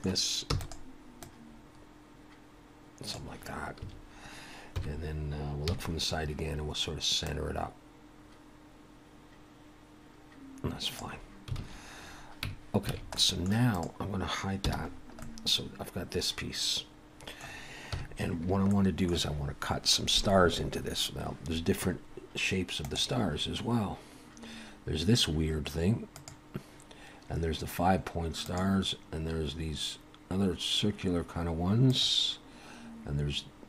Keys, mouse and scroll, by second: 0.5 shift+middle click, 0.5 e, 1.2 click, 3.8 a, 4.8 KP_1, 5.7 KP_3, 6.2-7.3 scroll up 3, 7.3 click, 7.3 scroll up 1, 11.6 alt+a, 12.1-12.9 scroll down 2, 12.5 Tab, 12.9 alt+a, 13.2 middle click, 13.7 click, 14.6 h, 14.9-15.6 scroll down 3, 15.2 middle click, 17.9 KP_1, 18.7 shift+middle click.